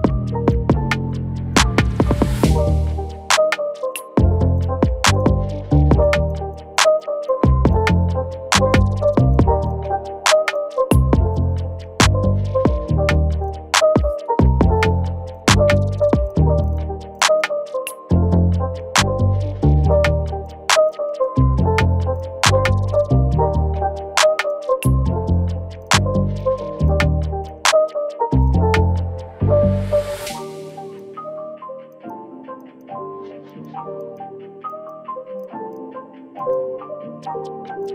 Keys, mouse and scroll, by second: 1.1 shift+click, 9.8 scroll down 1, 11.3 shift+click, 12.6 alt+click, 15.5 double click, 17.3 double click, 17.4 alt+click, 21.2-22.5 scroll down 1, 26.4 shift+click, 37.2-37.9 scroll up 1.